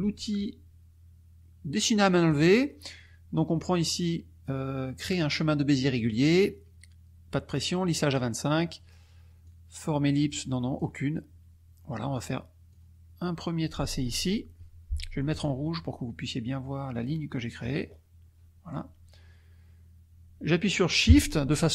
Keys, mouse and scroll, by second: 2.3 click, 9.4-11.0 drag, 12.8-14.2 drag, 15.6 middle click, 17.0-18.2 scroll up 5.